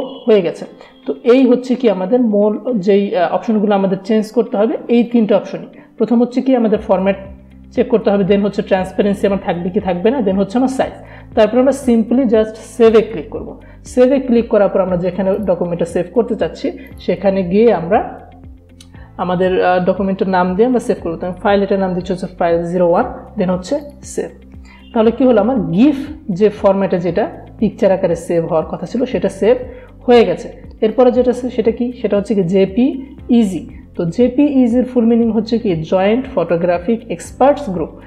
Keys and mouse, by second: 5.0 click, 12.9 click, 15.4 click, 19.9-21.3 typing, 23.9 click, 31.0 click.